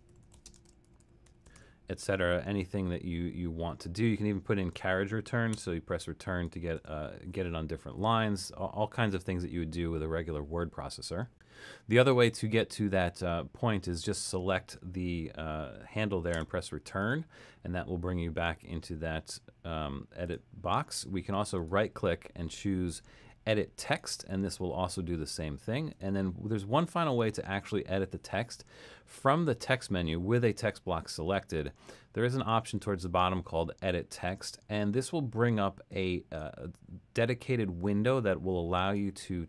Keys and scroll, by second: 0.0-2.1 typing, 5.6 Return, 6.8 Return, 16.4 Return.